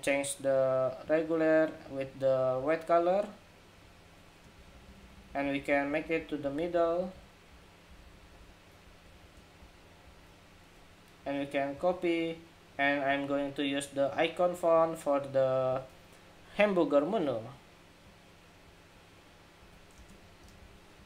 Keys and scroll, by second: 11.4 super+d.